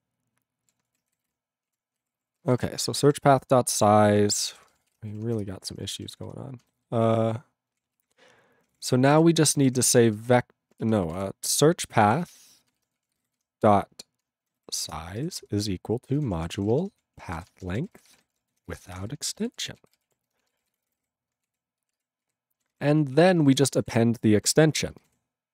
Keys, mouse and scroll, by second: 1.7 ctrl+a, 2.1 ctrl+=, 2.4 ctrl+space, 2.5 ctrl+e, 2.6 ctrl+g, 3.1 ctrl+s, 5.5 c, 6.0 ctrl+n, 6.1 ctrl+n, 6.2 ctrl+n, 6.5 ctrl+p, 6.6 ctrl+b, 6.8 ctrl+b, 7.8 ctrl+p, 7.9 ctrl+a, 8.7 ctrl+o, 8.8 Tab, 8.9-21.6 typing, 14.5 ctrl+n, 14.6 ctrl+n, 14.9 Return, 21.8 ctrl+space, 21.9 ctrl+e, 22.2 ctrl+g, 22.6 ctrl+n, 22.8 ctrl+n, 23.1 ctrl+a, 23.3 ctrl+space, 23.4 ctrl+n, 23.5 ctrl+n, 23.8 ctrl+w, 24.5 ctrl+e, 24.7 ctrl+a, 24.9 ctrl+space, 25.0 ctrl+n, 25.1 ctrl+w.